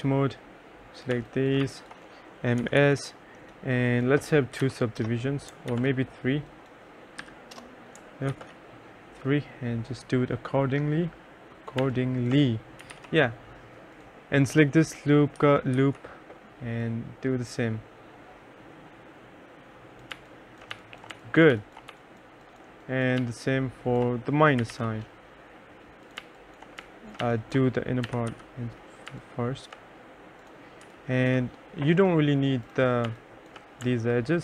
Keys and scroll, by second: 1.2-3.4 typing, 4.7 2, 5.1 Return, 5.8 ctrl+z, 7.3 3, 7.6 Return, 8.4 ctrl+z, 11.9-13.5 typing, 15.5 m, 15.8 s, 20.2-23.3 typing, 24.4-29.2 typing, 33.1 3.